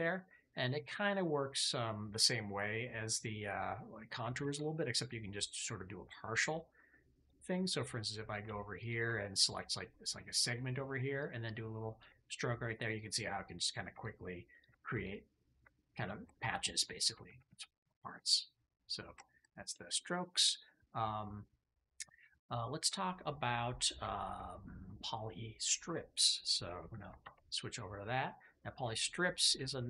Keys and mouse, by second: 3.6 middle click, 4.3 ctrl+z, 7.1 click, 8.7 ctrl+shift+click, 12.3 click, 15.0 ctrl+click, 16.0 shift+click, 16.2 click, 17.2 ctrl+z, 17.4 ctrl+z, 17.7 ctrl+z, 18.2 click, 19.1 shift+click, 19.6 click, 20.0 click, 23.1 click, 24.0 shift+click, 27.1 alt+q, 29.3-29.8 drag.